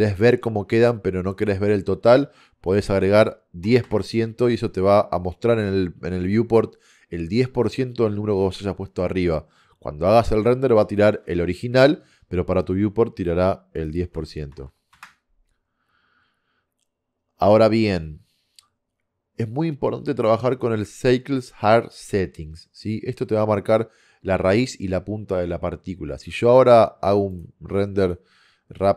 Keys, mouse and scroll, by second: 2.7-6.0 drag, 9.2 click, 14.7 KP_0.